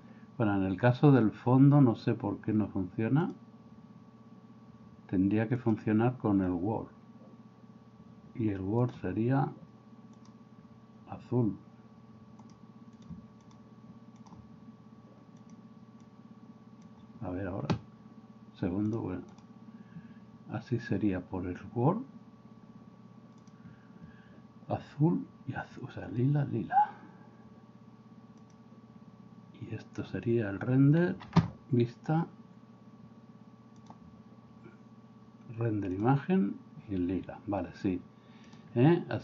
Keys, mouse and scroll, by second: 3.2-8.5 drag, 8.9 click, 10.2 click, 12.4 click, 13.4 click, 14.2 click, 18.9 click, 19.3 click, 23.6-25.0 drag, 28.5 click, 33.9-36.0 drag.